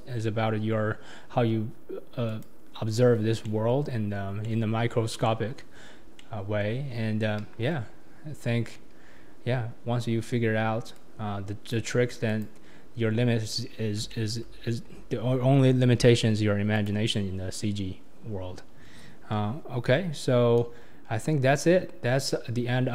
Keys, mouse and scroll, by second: 2.3 click, 3.4-6.8 middle drag, 6.8-7.4 scroll down 4, 7.4 KP_1, 7.7-8.4 scroll down 5, 9.2 scroll up 4, 10.9 click, 12.3 click, 13.3-14.1 scroll up 5, 14.1-16.7 shift+middle drag, 16.7 click, 19.8 ctrl+d, 20.7-21.3 scroll down 7.